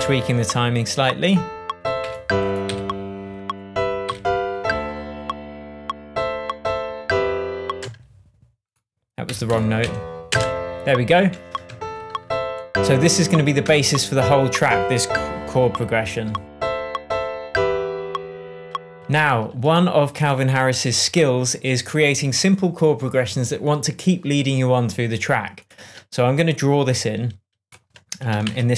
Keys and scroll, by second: 2.0 p, 2.6 Right, 4.0 Right, 7.8 space, 9.2 p, 9.8 Down, 10.2 space, 11.6 shift+Tab, 13.6 BackSpace, 18.9 shift+super+space, 19.1 super+s, 28.4 shift+super+m.